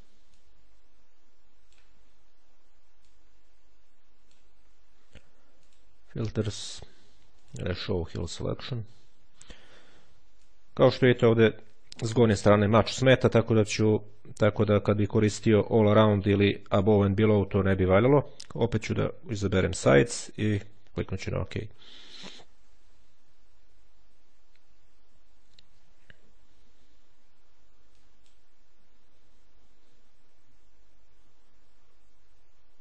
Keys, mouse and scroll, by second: 0.1-2.1 drag, 2.9-4.7 drag, 5.5 click, 7.1 click, 10.3-11.3 drag, 14.0 click, 19.5 click, 21.0 click, 27.7 click.